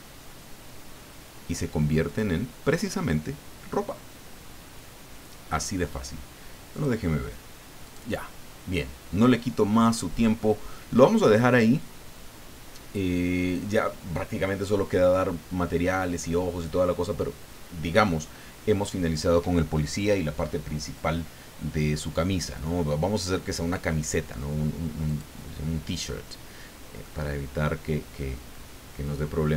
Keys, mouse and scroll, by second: 6.7 click, 7.8 click, 25.0 click, 27.0-29.5 middle drag.